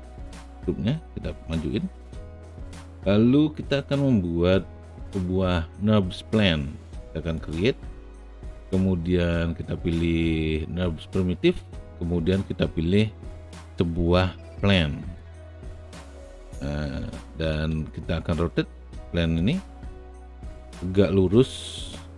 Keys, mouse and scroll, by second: 0.3-2.4 drag, 19.9-20.9 drag.